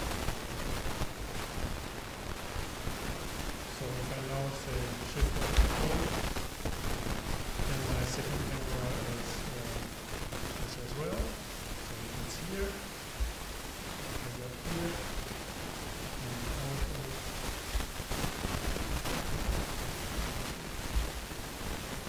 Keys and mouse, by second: 5.6 ctrl+alt+KP_0, 11.2 KP_0, 14.0-15.6 drag, 16.9 ctrl+KP_0, 17.8 alt+KP_0.